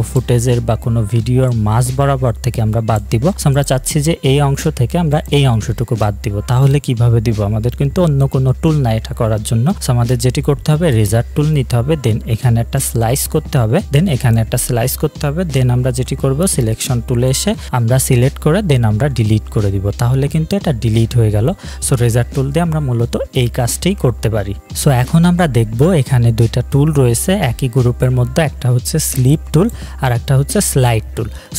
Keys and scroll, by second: 12.1-12.8 typing, 15.9 v, 19.0 Delete.